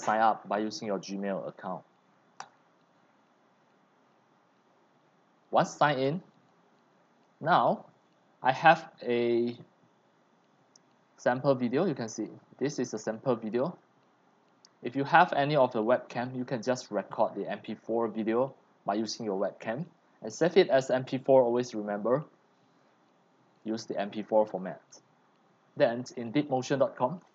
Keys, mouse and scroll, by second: 2.5 click, 4.1-7.2 drag, 7.3 click, 8.6 click, 8.7 click, 13.8 click, 14.4 click, 15.1 click, 16.5-16.9 drag, 17.1 click, 17.6 scroll down 1, 19.2 click, 21.4 right click, 24.9 click, 26.7-27.3 drag.